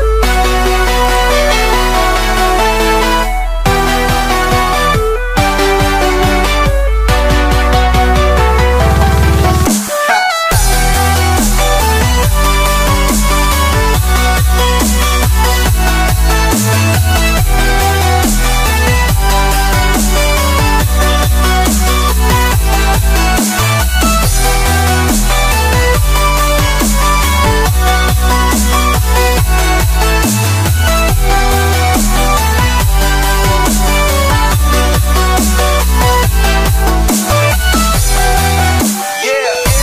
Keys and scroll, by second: 16.6 ctrl+e, 20.8 ctrl+shift+a.